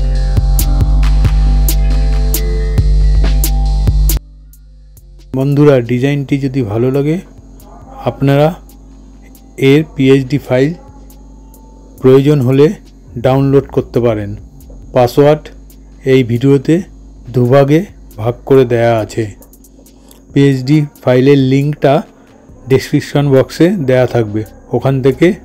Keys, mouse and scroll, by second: 0.0-3.1 typing, 4.4-4.7 typing, 7.4-8.4 typing, 14.3 typing, 17.6 typing.